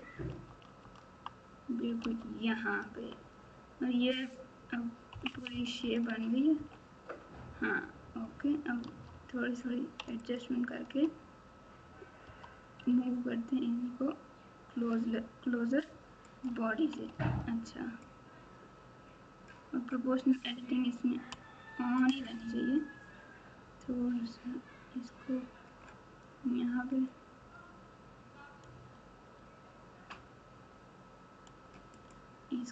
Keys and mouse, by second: 2.8 Tab, 5.1 KP_2, 5.3 KP_2, 6.5 KP_1, 8.8 Tab, 10.2 alt+click, 12.2 g, 17.0 alt+z, 18.3-19.5 drag, 22.1 g.